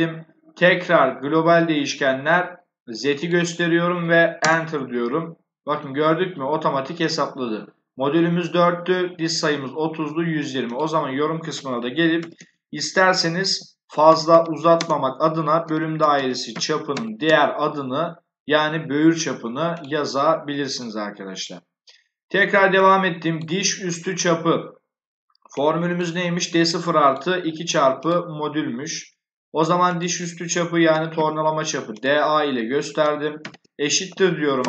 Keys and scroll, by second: 4.3 Return, 12.1-17.6 typing, 30.8 d, 31.0 a, 33.3 shift+0, 34.5 BackSpace.